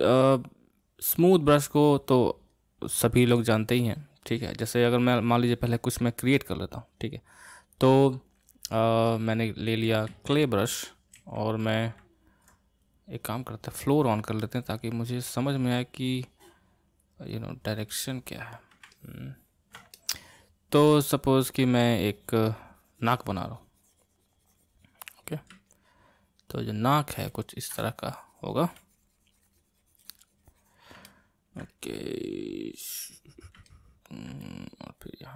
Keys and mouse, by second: 6.1-10.1 drag, 10.1 c, 11.1 f, 14.4-17.9 drag, 17.9-21.9 middle drag, 21.9-24.9 drag, 25.7-27.8 middle drag, 27.8-30.8 drag, 31.1 middle click, 31.7-33.7 drag, 33.7 middle click, 34.4-35.3 drag.